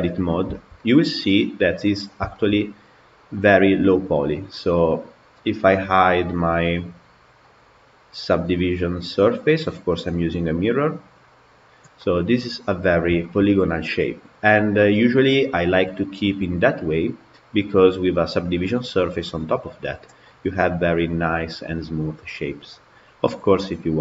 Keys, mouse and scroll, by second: 0.4-5.4 shift+middle drag, 6.2-7.4 drag, 8.4 click, 11.3 click, 11.8-12.8 middle drag, 12.8 scroll down 1, 13.1-19.1 shift+middle drag, 19.1 click, 20.1-24.0 middle drag.